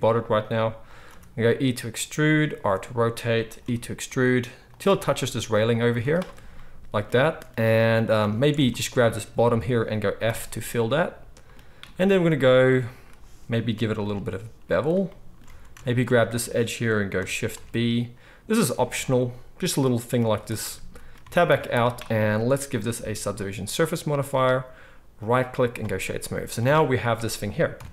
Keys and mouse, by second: 1.0 e, 1.6-16.0 right drag, 2.6 r, 3.6 e, 5.0 s, 5.8 z, 8.2 alt+a, 8.7 alt+shift+click, 8.7 alt+shift+middle click, 10.2 f, 12.0-13.0 middle drag, 14.0 ctrl+b, 15.5 alt+a, 16.0 alt+shift+middle click, 16.3-17.5 alt+right drag, 17.5 ctrl+b, 17.5-23.3 ctrl+drag, 20.1 z, 21.1 Tab, 21.4 z, 22.7-23.3 right drag, 26.6 alt+a, 27.7 KP_7.